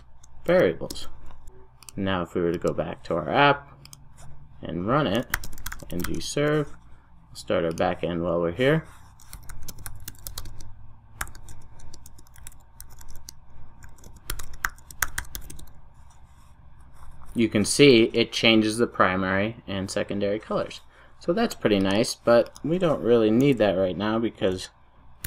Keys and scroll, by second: 1.2 Return, 1.4 super+s, 23.4 super+a.